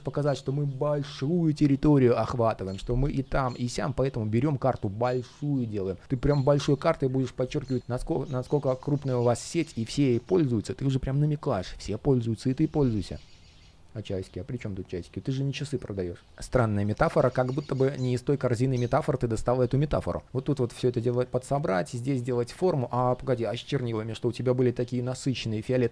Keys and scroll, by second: 22.4 super+z.